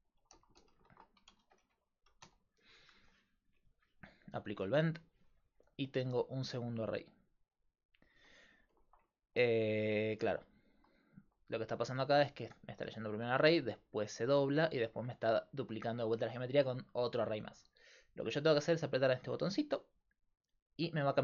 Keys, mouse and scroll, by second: 4.5-8.6 drag, 8.6 middle click, 9.1 click, 20.4-21.2 drag.